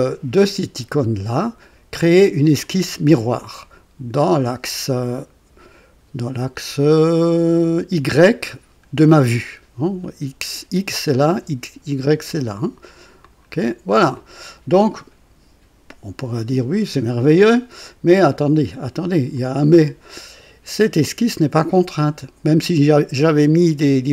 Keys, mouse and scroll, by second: 2.6 click, 4.1 click, 13.2 click, 19.1 click.